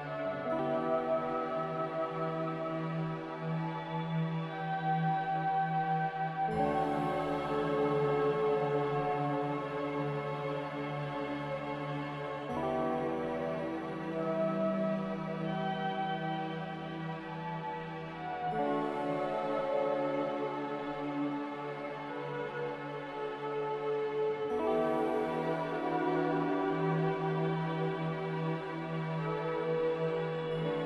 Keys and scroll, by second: 17.6 ctrl+c.